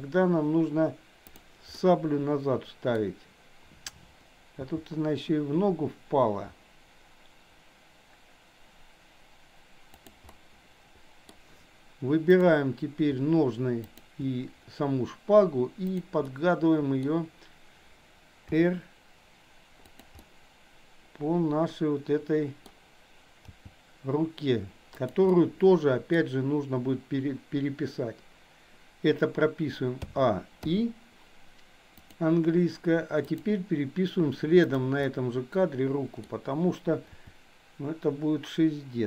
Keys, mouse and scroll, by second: 1.3 click, 1.8-3.0 middle drag, 4.6 g, 10.3-11.3 middle drag, 12.3 click, 13.9 shift+click, 15.9 click, 16.3-17.0 middle drag, 18.5 r, 20.1-22.5 middle drag, 23.5 g, 25.4-26.1 middle drag, 26.1 scroll down 1, 30.0 a, 30.6 i, 32.0 click, 33.4 click, 34.6 click, 35.0-36.3 middle drag, 37.1 r.